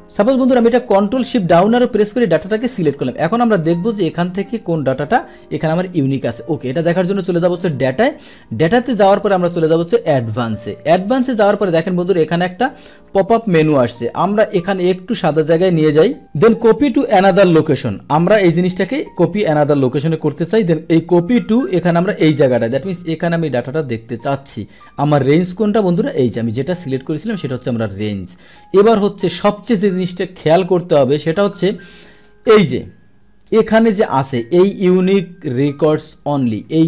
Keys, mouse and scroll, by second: 0.0 click, 1.2 ctrl+shift+Down, 3.3 click, 7.7 click, 10.1 click, 12.5 click, 14.4-15.1 drag, 16.0 click, 17.5 click, 21.0 click, 21.9 click, 25.0 click, 28.5-29.2 drag, 31.4 click, 32.4 click, 33.5 click.